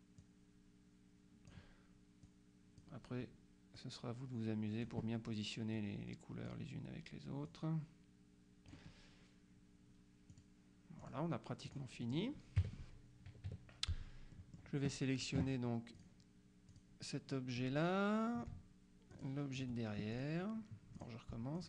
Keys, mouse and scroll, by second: 0.3-2.1 drag, 2.3 click, 3.8-5.4 drag, 5.8 click, 7.5-9.3 drag, 10.4 click, 11.1 click, 11.8 click, 12.7 KP_Subtract, 13.5 KP_Subtract, 14.4 middle click, 16.1 click, 16.8 click, 19.2 shift+click, 20.2 shift+click, 21.0 click.